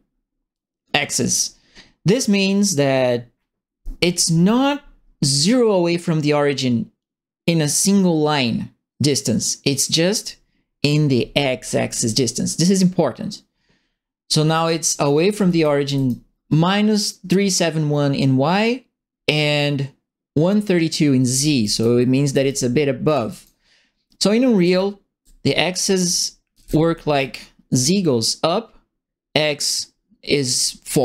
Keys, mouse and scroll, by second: 15.0-16.0 right drag, 15.1-16.3 typing, 21.0-27.0 typing, 21.4-22.4 right drag, 23.0 right click, 24.6-27.1 right drag.